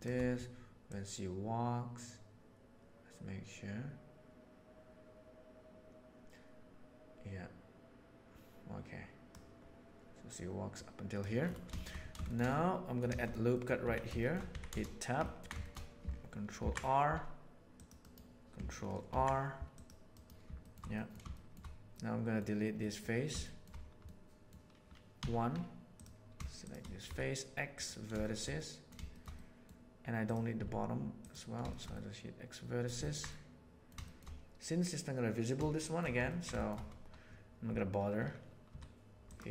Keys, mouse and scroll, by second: 0.9-3.9 drag, 6.5-9.3 drag, 10.7 middle click, 11.7 shift+middle click, 12.2-13.0 shift+middle drag, 13.4 middle click, 13.8 Tab, 14.4 a, 15.2 ctrl+middle click, 16.6 ctrl+r, 19.1 ctrl+r, 20.8 middle click, 21.2 shift+middle click, 21.9 middle click, 22.8 middle click, 23.4 shift+middle click, 24.0 middle click, 25.2 1, 27.0 x, 28.2 middle click, 28.5 middle click, 29.1 middle click, 29.3 middle click, 30.5 x, 31.6 shift+middle click, 31.9 middle click, 33.0 ctrl+middle click, 33.3 middle click, 34.0 shift+middle click, 35.7 shift+middle click, 36.2 ctrl+middle click, 36.5 shift+middle click, 38.7 2.